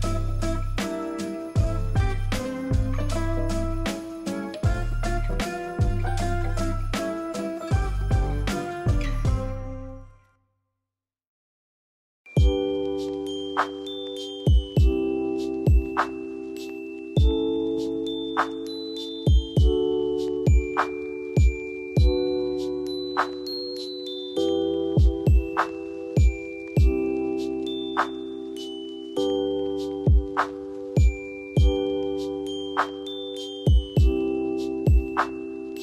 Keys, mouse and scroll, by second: 5.0 ctrl+alt+z, 6.1 alt+click, 20.3 ctrl+a, 21.9 ctrl+d.